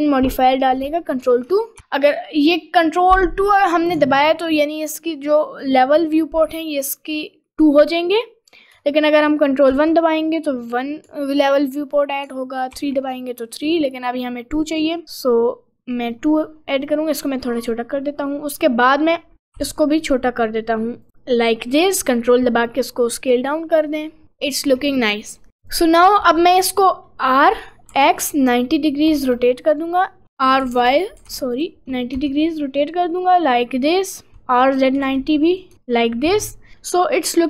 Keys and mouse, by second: 1.8 ctrl+2, 9.7 ctrl+1, 12.8 ctrl+3, 14.8 click, 17.4 click, 19.6 s, 21.1 middle click, 21.4 middle click, 22.0 click, 22.9 middle click, 23.9 middle click, 24.6 middle click, 25.5 middle click, 26.2 middle click, 27.2 middle click, 27.6 r, 30.2 middle click, 30.5 click, 30.7 r, 32.2 Tab, 32.6 click, 33.3 click, 34.3 Tab, 34.3 r, 35.7 Tab, 35.8 middle click, 36.7 middle click.